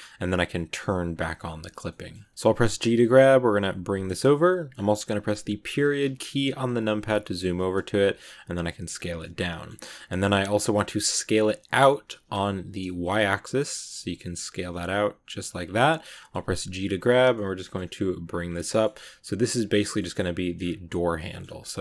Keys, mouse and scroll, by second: 0.9 click, 1.5 shift+middle click, 2.0 scroll up 2, 2.2 shift+middle click, 2.4 g, 5.6 KP_Decimal, 6.3-6.9 scroll down 6, 7.1 middle click, 7.5-7.9 scroll down 1, 7.9 s, 9.1 middle click, 9.9 s, 15.5 scroll up 1, 15.6 scroll down 1, 15.7 middle click, 16.3 g, 17.2 middle click, 17.8 g, 18.4 middle click, 18.8 g, 19.6 s, 20.5 scroll up 1, 20.5 scroll down 2, 20.8 middle click, 21.4 g.